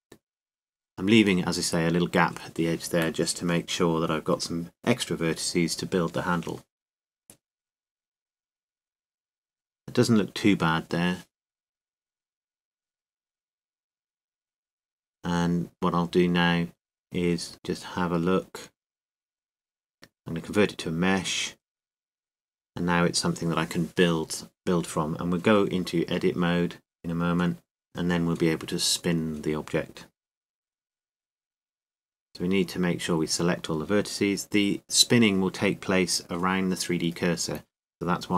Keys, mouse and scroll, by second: 6.7-8.4 right drag, 7.1 g, 8.4-9.6 middle drag, 9.7 g, 13.9 Tab, 16.0 Tab, 17.0 Tab, 19.9-21.8 drag, 25.1 t, 27.9-30.9 drag, 32.3 Tab, 35.4 a.